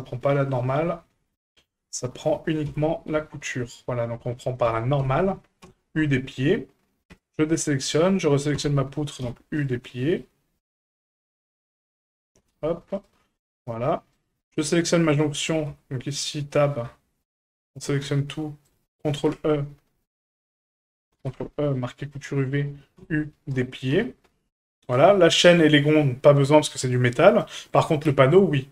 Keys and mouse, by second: 4.7 l, 5.0 l, 5.6 u, 7.1 a, 8.6 l, 9.2 u, 13.4 a, 14.4 Tab, 14.7 middle drag, 15.3 right click, 15.7 Tab, 16.8 a, 18.0 a, 19.2 ctrl+e, 22.9 u, 23.9 Tab, 24.8 right click, 25.4 middle click, 26.7 middle click, 27.3 shift+middle click, 27.7 right click, 28.1 Tab, 28.6 middle click.